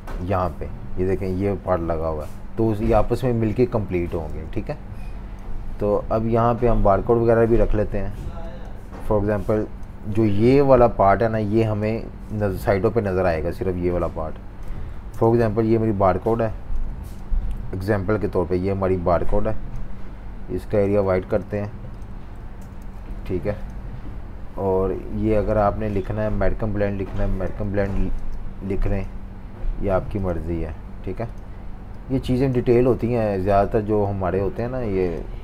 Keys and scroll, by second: 4.3 typing, 6.5 v, 11.8 space, 12.2 space, 17.5 typing, 21.0 v, 21.3 super+3, 25.3 typing, 27.6 typing.